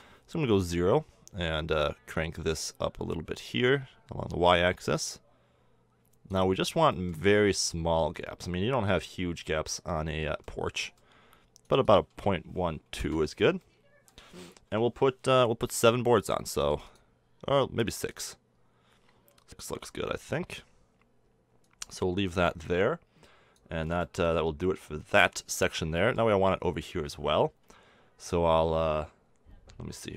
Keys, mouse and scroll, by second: 2.1-6.6 drag, 6.6-6.9 middle drag, 7.0-11.6 middle drag, 11.6-13.5 drag, 13.6-14.7 middle drag, 14.7 KP_7, 22.1-24.5 drag, 24.0-24.5 right drag.